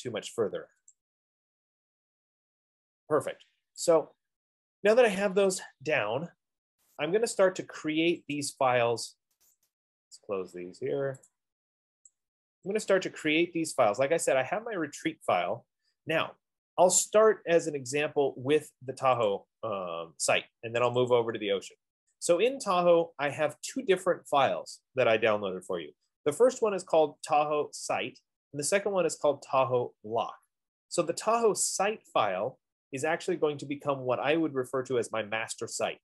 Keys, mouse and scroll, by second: 7.5 click, 8.7 click, 10.0 click, 14.2 click, 15.2-19.2 drag, 19.8-20.9 drag, 21.5 click.